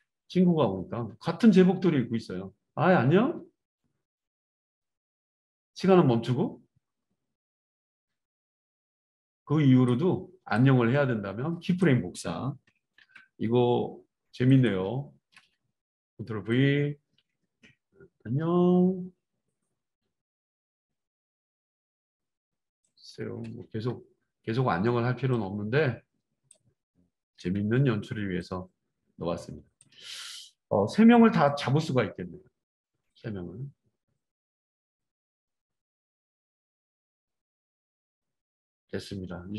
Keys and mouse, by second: 1.5-39.5 drag, 13.0 ctrl+c, 15.3 ctrl+v, 23.4 ctrl+v, 27.3 ctrl+c, 30.1 ctrl+v.